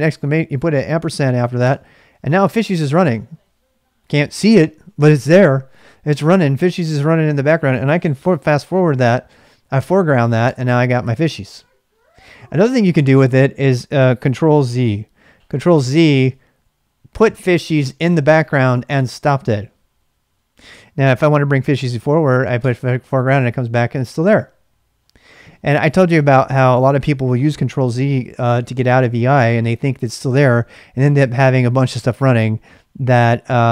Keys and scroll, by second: 1.6 Return.